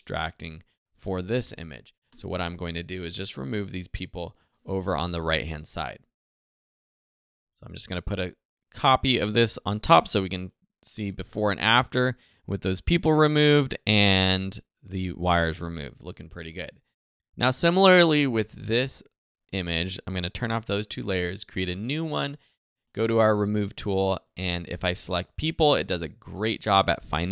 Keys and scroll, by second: 2.1 alt+Return, 4.7 Return, 5.9 z, 6.8 alt+super+z.